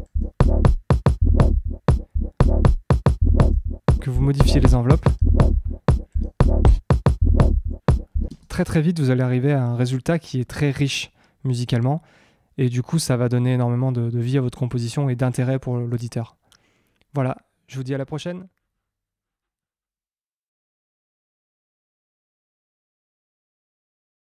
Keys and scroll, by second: 8.2 space.